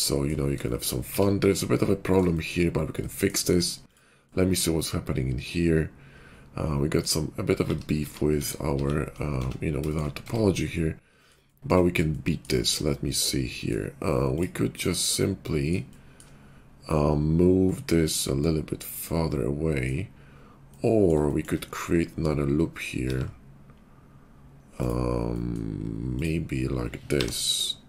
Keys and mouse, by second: 1.0-6.2 middle drag, 1.2 Tab, 7.6 ctrl+z, 7.9 ctrl+z, 8.3 ctrl+z, 8.6 ctrl+z, 9.3 Tab, 10.2 Tab, 11.7-14.2 shift+middle drag, 14.2 click, 14.3-20.3 middle drag, 20.3 click, 20.9-22.4 shift+middle drag, 23.0 ctrl+r, 23.1-26.5 middle drag, 27.0 k.